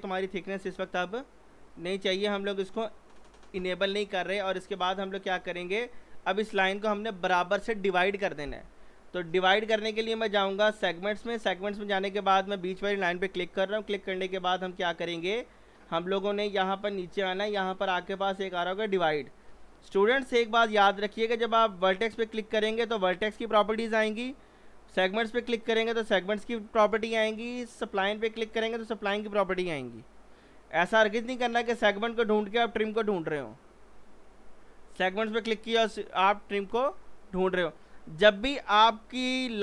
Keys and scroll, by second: 3.5 g.